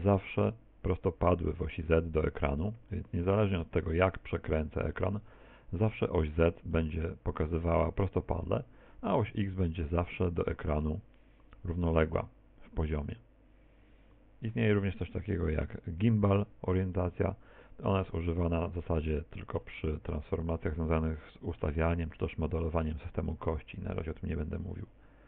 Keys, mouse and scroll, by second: 2.5 middle click, 4.9 middle click, 6.8 middle click, 8.9 middle click, 14.8 click, 17.0 middle click, 20.5 middle click, 22.5 shift+middle click.